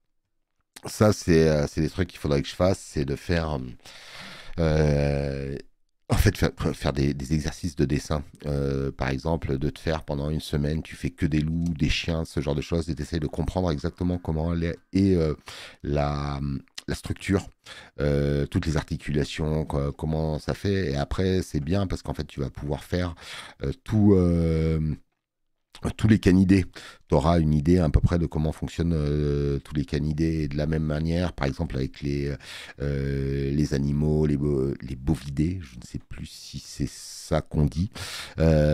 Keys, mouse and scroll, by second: 0.1 space, 0.3 click, 5.9 space, 6.9 click, 9.1 space, 9.3 click, 13.1 space, 13.5 click, 14.5 space, 21.7 space, 21.9 click, 25.5 alt+scroll up 2, 26.1 space, 26.2 click.